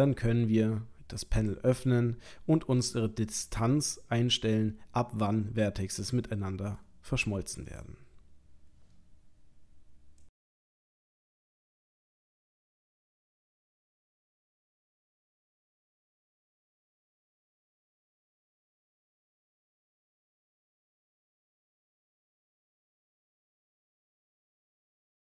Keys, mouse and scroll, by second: 1.4 click, 7.7 click.